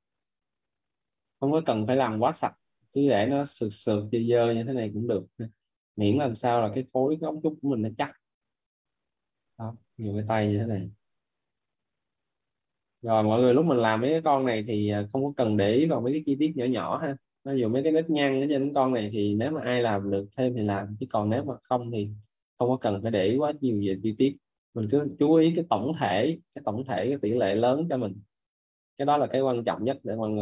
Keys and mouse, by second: 0.4 click, 1.5 right click, 3.9 click, 8.1 click, 9.8-12.0 typing, 12.1 click, 12.8 right click, 13.2 click, 17.0 right click, 20.0 right click, 20.3 click, 22.1 right click, 23.2 shift+l, 26.1 shift+r, 27.5 click, 29.2 right click.